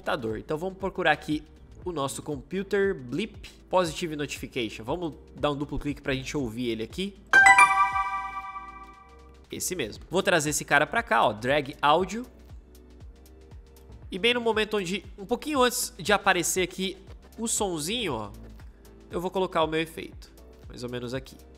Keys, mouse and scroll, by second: 7.2 space.